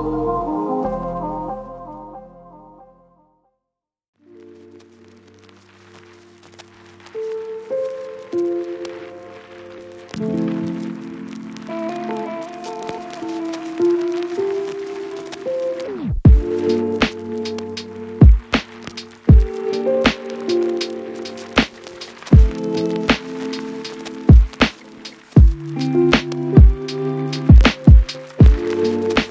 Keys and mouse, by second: 0.2 ctrl+x, 0.3 ctrl+alt+shift+click, 0.9 ctrl+shift+click, 1.0 ctrl+shift+x, 1.7 Tab, 1.7 1, 1.8 shift+click, 2.0 ctrl+shift+click, 2.1 ctrl+z, 2.6 shift+middle click, 2.8 1, 2.9 ctrl+z, 3.1 shift+middle click, 3.2 Tab, 3.6 ctrl+z, 3.8 Tab, 3.8 shift+middle click, 4.2-6.6 typing, 4.3 shift+middle click, 4.4 Tab, 5.8 ctrl+z, 6.0 ctrl+z, 6.6-7.7 ctrl+z, 6.9 ctrl+click, 7.9 KP_7, 8.1 ctrl+click, 8.2 ctrl+r, 8.5 g, 8.6 ctrl+click, 9.1 ctrl+z, 9.1 ctrl+click, 9.3 ctrl+z, 9.5 ctrl+r, 10.1-12.1 typing, 10.7 shift+click, 10.7 shift+middle click, 10.7 shift+right click, 11.0 shift+click, 11.3 shift+click, 11.9 shift+click, 12.1 shift+click, 12.6 shift+click, 12.9 Tab, 12.9 ctrl+x, 12.9 ctrl+click, 13.1 Tab, 13.1 ctrl+r, 13.9 j, 14.1 Tab, 14.4 ctrl+x, 14.5 ctrl+r, 15.2 Tab, 15.4 Tab, 15.9 Tab, 15.9 ctrl+x, 16.7 KP_7, 16.7 g, 17.0 ctrl+click, 17.1 Tab, 17.5 shift+click, 17.5 shift+j, 18.1 ctrl+click, 18.1 ctrl+r, 18.4 ctrl+click, 18.7 j, 18.8 middle click, 19.0 j, 19.1 shift+click, 19.5 ctrl+shift+click, 19.6 ctrl+r, 20.1 shift+click, 20.1 shift+j, 20.3 Tab, 20.5 Tab, 20.7 shift+click, 21.2 Tab, 21.2 ctrl+x, 21.4 1, 21.6 ctrl+click, 21.6 ctrl+r, 21.9 shift+click, 22.1 j, 22.3 Tab, 22.5 Tab, 22.5 ctrl+x, 22.9 shift+click, 22.9 shift+j, 23.5 ctrl+j, 23.5 ctrl+click, 23.6 ctrl+r, 24.1-26.2 typing, 26.4 alt+x, 26.8 right click, 27.8 click, 28.1 click, 28.2 Tab, 28.3 click, 28.7 click, 29.1 Tab, 29.2 Tab.